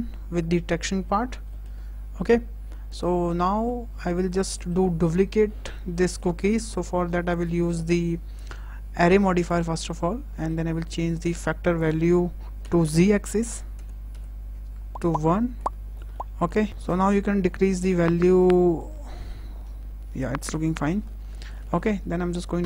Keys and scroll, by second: 12.5 KP_0, 13.2 Tab, 14.0 KP_1, 14.8 Return.